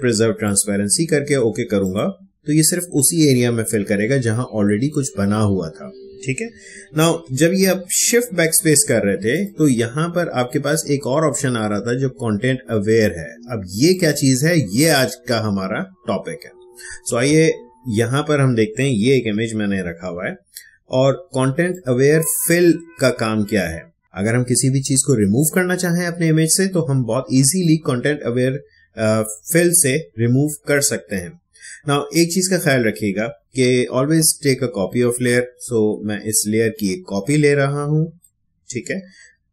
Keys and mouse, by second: 0.4 click, 6.4 click, 6.7 ctrl+z, 7.7 shift+BackSpace, 9.3 click, 13.9 click, 14.8 Escape, 17.4 ctrl+Tab, 21.4 space, 21.7 click, 21.9 space, 36.3-39.5 drag.